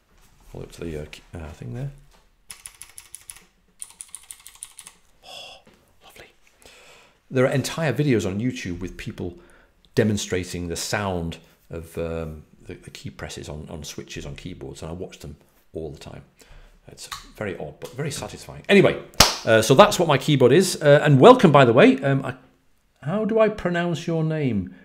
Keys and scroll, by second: 4.2-4.5 typing, 17.0 typing.